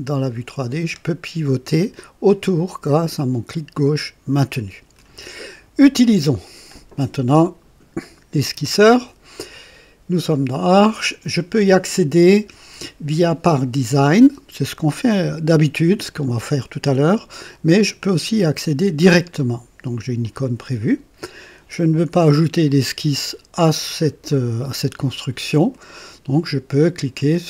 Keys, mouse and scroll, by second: 10.6 click, 20.1 click, 22.1 right click, 24.2-25.8 drag.